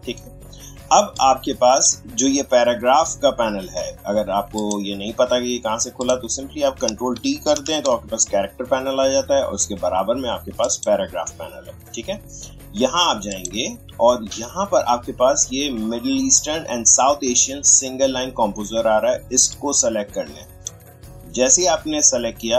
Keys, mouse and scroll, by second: 4.6 click, 7.6 ctrl+t, 10.6 click, 13.3 click, 19.5-22.5 drag.